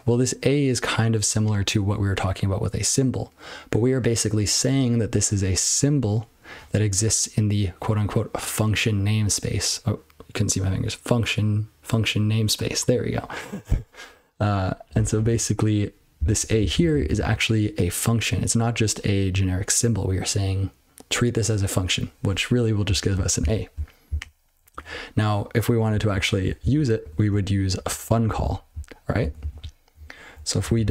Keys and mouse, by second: 5.7 click, 5.8 click, 14.9 click, 14.9 click, 15.3 ctrl+p, 16.1 ctrl+n, 16.3 ctrl+p, 16.6 ctrl+n, 16.7 ctrl+n, 16.9 ctrl+n, 17.1-23.1 ctrl+n, 23.3-23.7 ctrl+n, 24.0 ctrl+n, 26.1-26.4 ctrl+p, 26.6 ctrl+n, 27.0 ctrl+e, 27.3-27.8 ctrl+b, 28.1 ctrl+b, 28.2-29.0 ctrl+p, 29.2 ctrl+p, 29.3 ctrl+p, 29.5-29.9 ctrl+p, 29.9-30.3 ctrl+n, 30.6 ctrl+p, 30.8 ctrl+f.